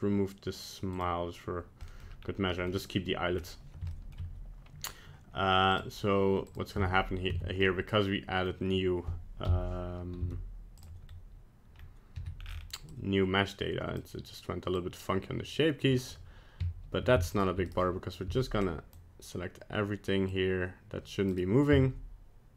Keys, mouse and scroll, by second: 0.9 click, 1.8 middle click, 2.2-2.5 scroll down 1, 2.5 middle click, 3.4-3.8 scroll up 1, 3.9 shift+middle click, 4.0 shift+middle click, 5.7 click, 6.5 click, 6.7 Tab, 7.3 Tab, 7.6 middle click, 9.5 KP_1, 10.2 z, 11.1 scroll up 1, 11.8-12.2 scroll up 1, 12.2 c, 18.3 c, 21.7 z.